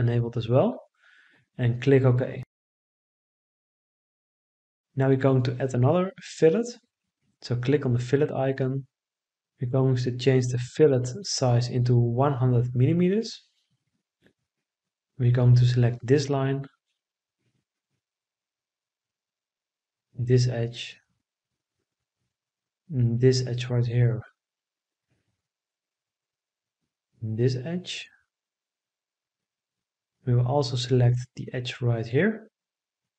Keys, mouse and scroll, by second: 8.8 1, 9.7 0, 11.6 Return.